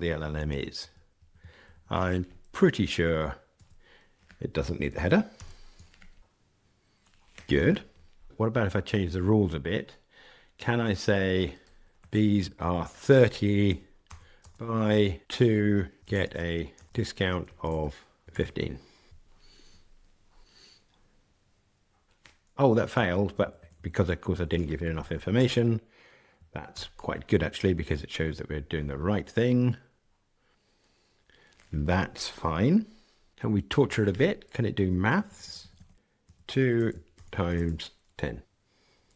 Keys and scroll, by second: 5.3 ctrl+r, 19.1 ctrl+r, 26.7 ctrl+r, 33.3 super+z.